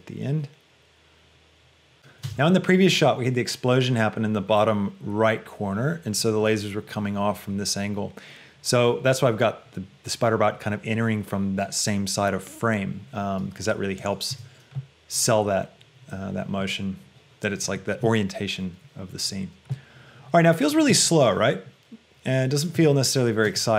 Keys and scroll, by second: 2.4 space, 14.5 space, 23.0 space.